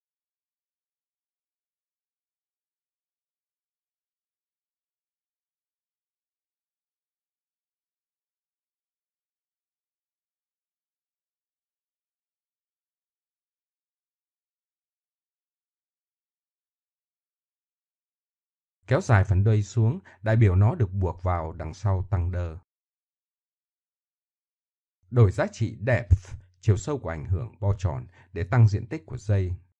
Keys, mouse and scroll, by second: 0.9 middle click, 1.5 middle click, 2.5 middle click, 2.7 g, 3.2 click, 4.1 middle click, 4.7 g, 5.2 g, 6.8 KP_1, 8.7 click, 9.5 middle click, 9.7 middle click, 9.8 middle click, 10.9 middle click, 12.1 click, 14.8-16.0 middle drag, 17.9 click, 20.1-20.8 drag, 21.7-26.0 middle drag, 26.6 click, 28.1 middle click, 28.7 KP_1.